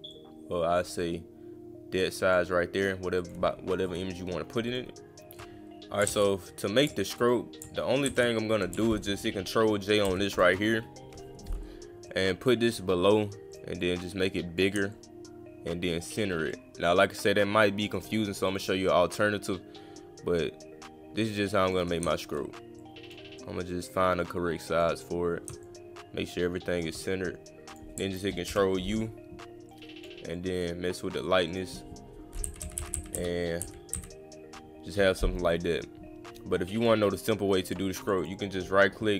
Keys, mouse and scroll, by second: 0.1 click, 1.0-2.4 drag, 3.2 click, 4.7 click, 8.0 ctrl+z, 12.1 click, 13.5 click, 13.8 click, 14.9-16.2 shift+drag, 16.5-18.0 shift+drag, 18.5-21.7 shift+drag, 22.8 click, 23.4-24.8 drag, 25.6-26.8 shift+drag, 27.7 click, 29.7-30.0 drag, 30.4 drag, 31.5 click, 36.8 click, 37.7 click, 38.0 click, 38.2 click.